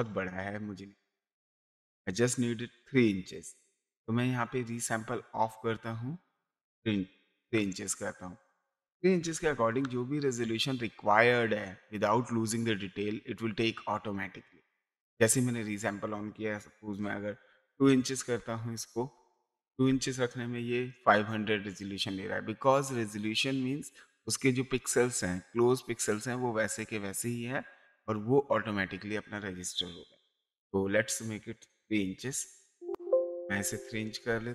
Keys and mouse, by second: 4.7 click, 6.4 click, 8.4 click, 9.3 KP_3, 17.1 KP_2, 18.4 BackSpace, 18.5 KP_2, 18.8 BackSpace, 19.7 KP_2, 32.2 KP_3, 33.6 BackSpace, 34.2 KP_3.